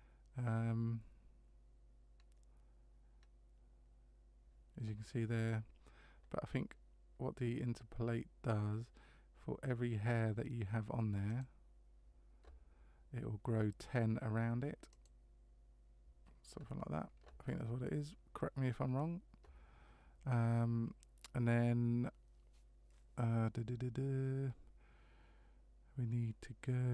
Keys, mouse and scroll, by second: 2.2 scroll down 1, 3.2 scroll down 1, 5.4-6.2 scroll up 2, 11.3 click, 15.0 click.